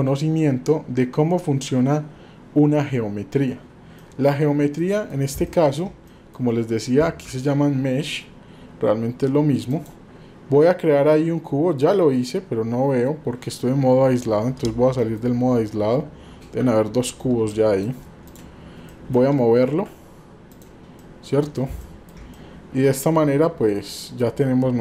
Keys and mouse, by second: 4.1 middle click, 4.9 middle click, 5.4-5.8 shift+middle drag, 6.2 middle click, 15.0 middle click, 16.6 KP_Divide, 17.6 middle click, 18.9 middle click, 21.0-21.6 middle drag, 21.9 shift+middle drag, 22.5-23.0 middle drag, 23.9-24.3 middle drag, 24.4-24.8 middle drag.